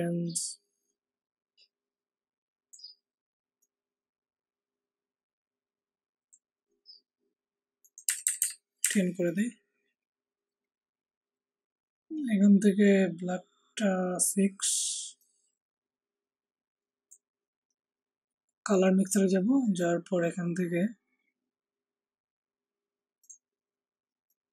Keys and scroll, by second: 8.0 Down, 8.2 Down, 8.3 Down, 8.8 Down.